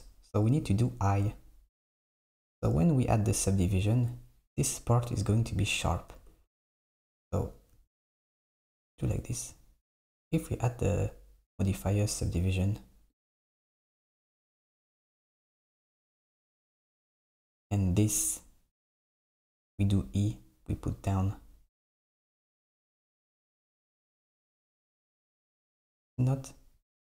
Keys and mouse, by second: 6.3 Tab, 7.0 Tab, 7.4 z, 7.8 z, 8.4 z, 10.3 click, 13.3-14.2 drag, 14.2 Tab, 16.2 Tab, 19.7 e, 22.3 click, 23.2 click, 24.6 click, 25.2 Tab.